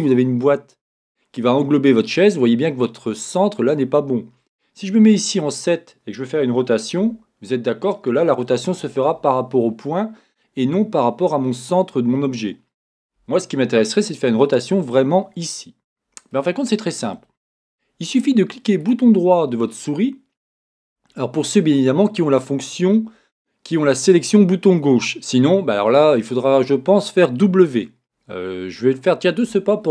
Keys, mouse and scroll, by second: 0.8 click, 2.4-29.9 middle drag, 6.7 KP_7, 13.3 Escape.